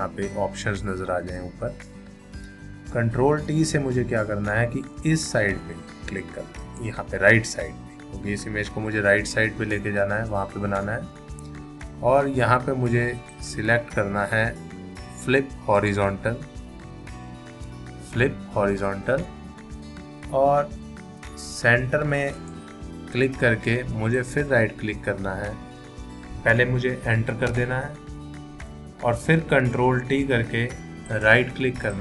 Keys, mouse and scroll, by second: 6.6 click, 14.7 right click, 15.8 click, 22.3 click, 24.2 right click, 27.5 Return, 29.9 ctrl+t, 31.1 right click.